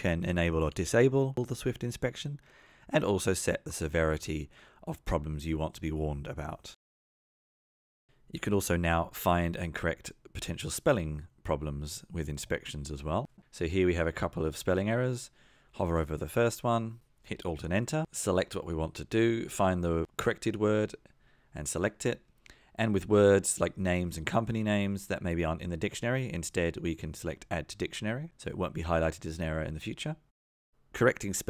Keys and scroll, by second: 13.9 F2, 16.8 F2, 17.5 alt+Return, 21.0 Return, 23.8 F2, 28.0 alt+Return, 30.4 F2.